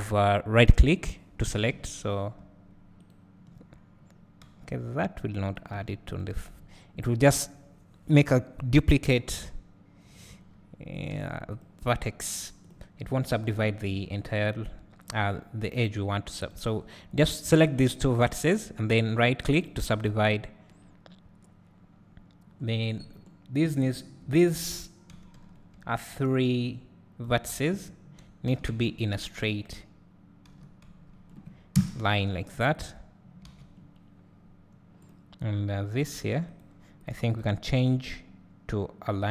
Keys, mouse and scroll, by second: 1.9 Tab, 4.5 g, 6.2 x, 6.6 scroll up 1, 8.1 scroll down 1, 9.3 click, 10.3 e, 11.6 x, 11.9 scroll up 2, 12.6 click, 13.0 scroll up 1, 13.3 scroll down 1, 14.3 shift+click, 15.2 scroll up 1, 16.1-18.1 scroll down 1, 18.1-19.7 right drag, 18.6 scroll up 1, 19.7-20.3 drag, 21.8 scroll down 1, 22.7 scroll up 1, 24.3 scroll down 1, 27.2 b, 28.6 s, 29.6 right click, 30.6 s, 32.7 click, 33.5 alt+a, 33.8 scroll down 1, 34.3-35.0 scroll up 1, 35.0 click, 36.1 g, 37.0 click, 37.3 click.